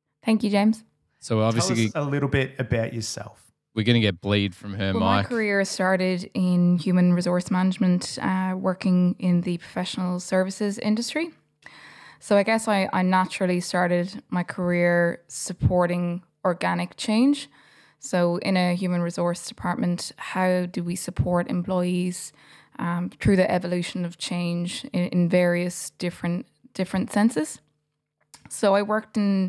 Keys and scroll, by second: 0.9 BackSpace, 3.0 Delete, 4.7 f, 5.4 f, 7.1 f, 7.7 g.